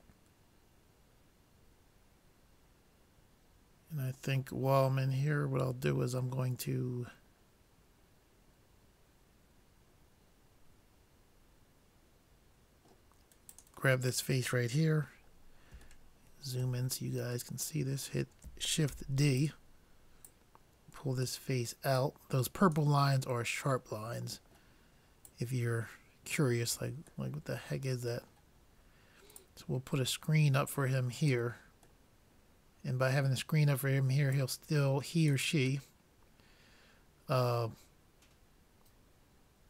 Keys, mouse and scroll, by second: 6.5-8.3 middle drag, 13.5-15.3 drag, 15.3 middle click, 16.1-18.5 middle drag, 18.9 shift+d, 20.3-21.9 drag, 25.0 middle click, 25.5-26.9 drag, 27.1 click, 27.3-29.2 middle drag, 29.4-31.1 drag, 32.3-33.9 middle drag, 34.4-36.1 drag, 36.1-38.0 middle drag.